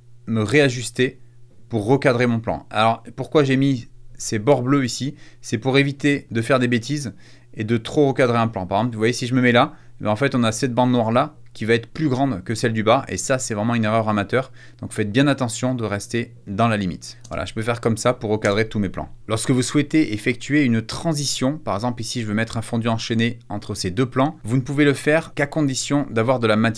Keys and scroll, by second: 17.3 space, 18.4 space.